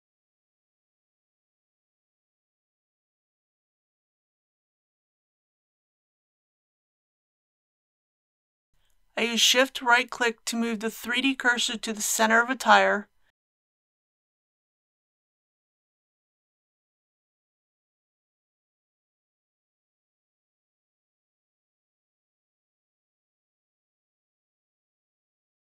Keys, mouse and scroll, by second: 1.0-1.5 typing, 2.0 click, 2.7 Tab, 4.7 alt+a, 5.6-8.7 middle drag, 8.8 KP_3, 9.9 shift+middle click, 10.7 scroll up 1, 11.9-14.5 shift+middle drag, 21.0 shift+right click, 23.4 shift+right click, 24.4 shift+right click.